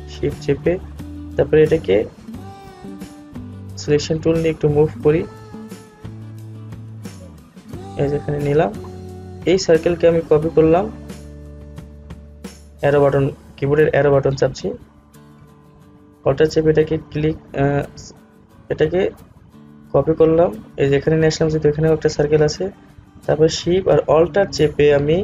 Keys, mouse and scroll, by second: 3.9-9.7 drag, 9.7 Left, 16.3 Right, 18.9-24.8 alt+drag.